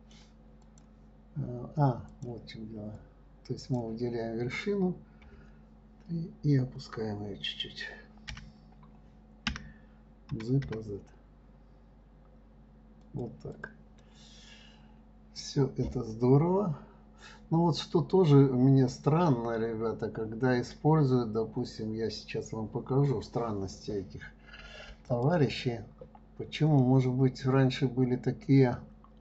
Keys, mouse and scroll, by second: 1.0 click, 2.5 click, 3.4-5.6 drag, 5.6 KP_3, 13.9 click, 14.4-17.4 middle drag, 21.3 scroll down 2, 22.5 scroll up 2, 25.5 click, 27.2-29.2 middle drag.